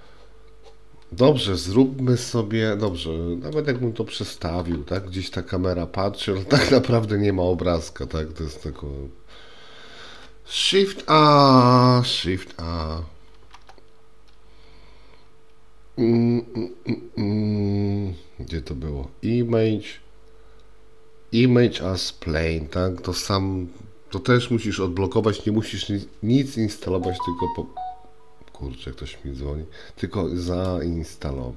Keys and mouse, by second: 2.9-3.6 middle drag, 5.0-6.3 middle drag, 13.4 shift+a.